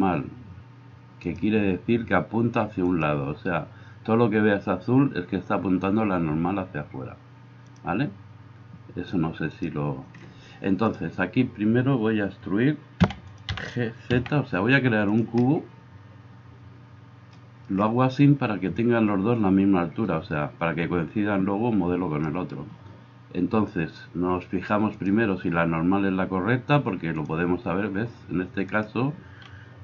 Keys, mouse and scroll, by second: 11.0-24.9 middle drag, 13.1 e, 13.6 g, 24.9-29.8 drag, 28.7-29.8 middle drag, 28.7-29.8 right drag.